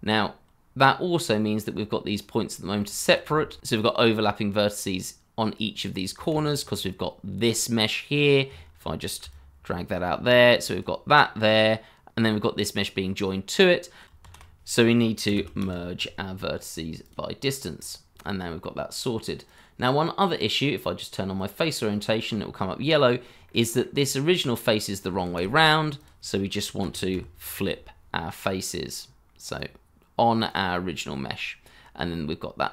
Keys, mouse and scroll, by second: 0.0-2.1 scroll up 1, 2.7 shift+middle click, 6.3 ctrl+z, 9.3 alt+click, 14.2 shift+a, 15.2-16.1 typing, 22.0-22.9 scroll down 1, 23.4 middle click, 25.2 shift+a, 26.8-27.6 typing, 32.1 middle click.